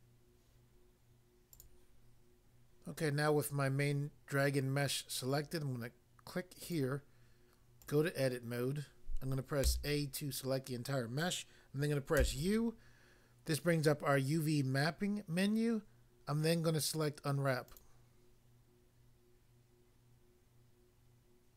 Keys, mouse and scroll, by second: 1.6 click, 1.7 click, 6.6 click, 6.7 click, 7.8 click, 7.9 click, 9.6 a, 12.2 u, 17.6 click.